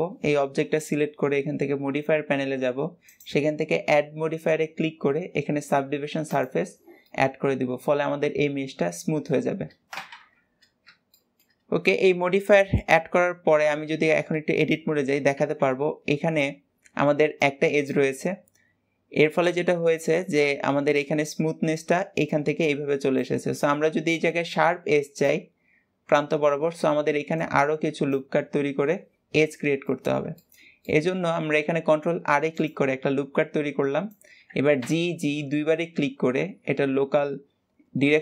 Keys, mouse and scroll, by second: 3.1-6.1 drag, 7.1-10.1 middle drag, 10.1 KP_1, 11.2 shift+middle click, 11.6 scroll up 1, 13.7 Tab, 29.9 middle click, 30.7 scroll up 1, 30.9 middle click, 31.6 ctrl+r.